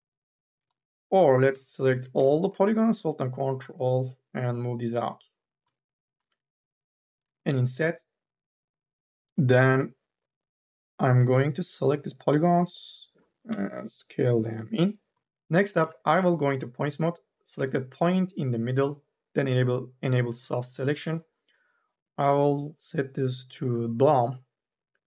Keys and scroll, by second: 0.9 2, 1.3 3, 7.0 m, 7.3 w, 11.1 9, 13.3 t, 15.2 3, 15.6 1.